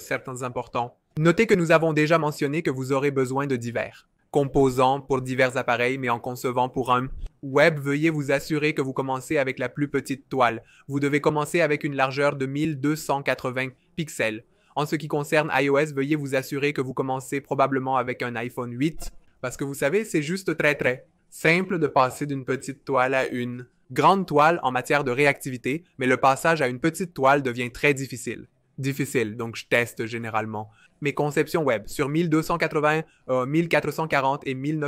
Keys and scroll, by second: 13.4 f, 22.3 super+z.